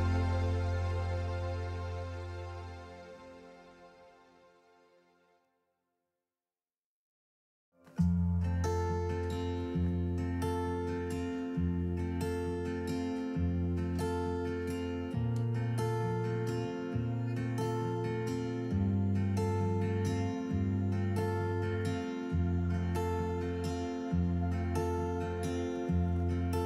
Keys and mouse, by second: 1.2 click, 2.3 click, 3.6-4.7 alt+s, 4.5 alt+click, 4.9 alt+s, 5.0 click, 6.0 alt+s, 6.6 alt+s, 6.6-7.5 alt+s, 7.3 alt+click, 8.2 click, 8.9-10.5 alt+s, 10.4 alt+click, 10.7 alt+s, 11.3 click, 12.1-14.8 alt+s, 14.9 alt+s, 15.0-15.3 alt+s, 16.7-18.1 alt+s, 17.9 alt+click, 18.2 alt+s, 18.9 click, 19.8 alt+s, 20.4-21.3 alt+s, 21.2 alt+click, 21.9-26.6 drag.